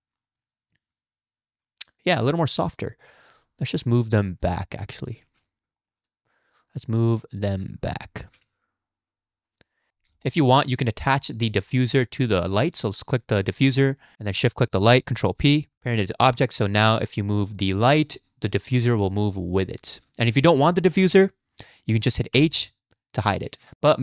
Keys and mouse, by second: 2.2 drag, 3.0 shift+drag, 4.4 click, 5.2 z, 5.8 shift+click, 6.5 click, 7.2 shift+click, 8.2 g, 10.2 shift+click, 11.2 shift+click, 11.5 click, 15.3 ctrl+p, 16.7 click, 18.0 g, 19.9 ctrl+z, 20.5-20.9 drag, 21.0-22.2 drag, 22.4 h, 23.5 ctrl+z.